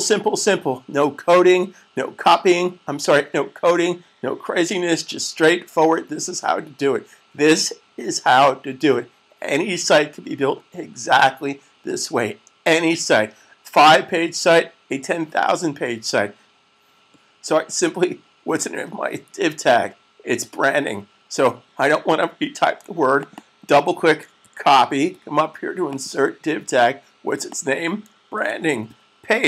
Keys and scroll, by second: 24.2 super+c, 28.5 super+v.